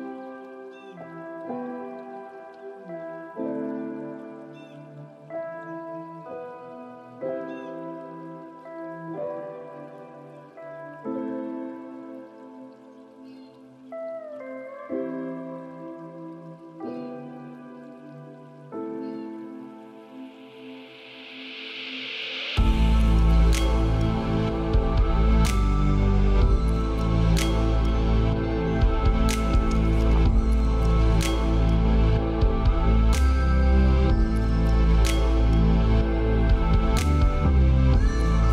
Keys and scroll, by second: 25.6 ctrl+v, 26.4 ctrl+a, 31.7 ctrl+a.